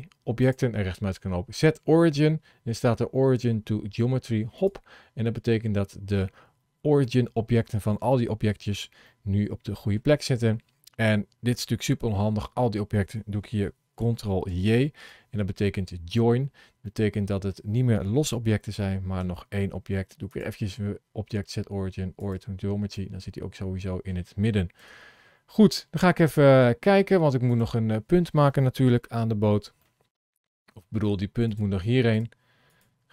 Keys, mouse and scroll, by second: 0.3 click, 5.7-6.2 scroll down 2, 6.9 middle click, 9.0 middle click, 14.3 ctrl+j, 16.7 middle click, 18.3 Tab, 19.2 Tab, 20.2 click, 22.8 middle click, 24.6 KP_7, 26.1 click, 27.5 click, 28.9-29.3 scroll up 4, 29.7 shift+middle click, 30.3 scroll down 1, 30.7 shift+middle click, 31.3 click, 32.1 click, 32.5 click.